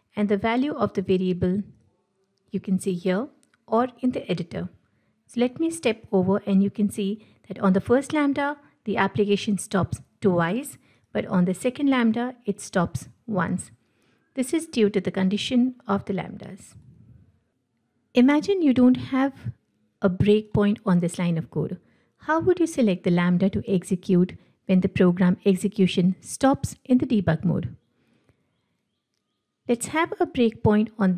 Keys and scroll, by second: 5.4 F8, 11.0 F8, 16.9 F8, 30.3 ctrl+F8.